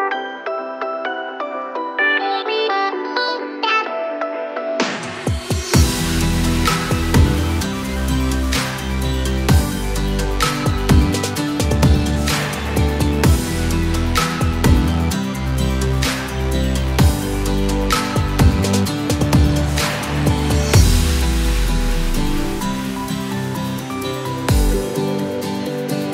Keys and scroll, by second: 7.5-10.3 typing.